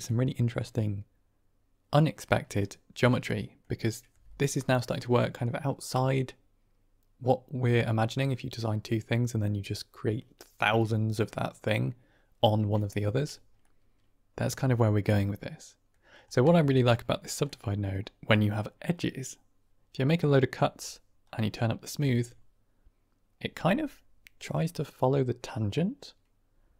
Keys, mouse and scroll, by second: 2.5-3.0 middle drag, 3.2-3.5 middle drag, 13.5-15.8 middle drag, 16.4 shift+middle drag, 17.4 middle click, 21.1-22.2 drag.